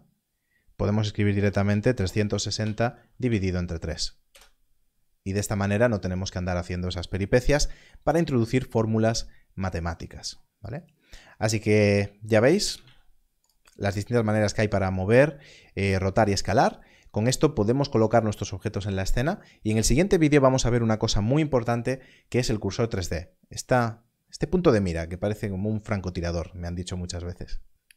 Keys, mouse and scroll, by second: 1.3 3, 2.6 shift+7, 3.2 3, 4.3 Return, 10.8 click, 12.8 z.